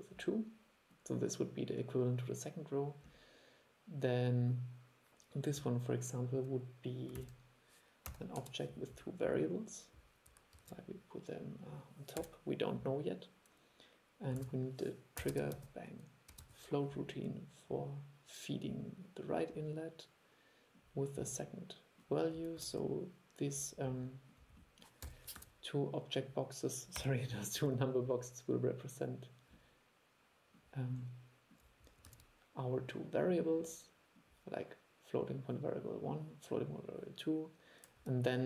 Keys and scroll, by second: 7.3 super+1, 10.7 super+3, 14.5 super+1, 22.8 super+1, 25.5 super+3, 27.7 super+3, 32.2 super+3.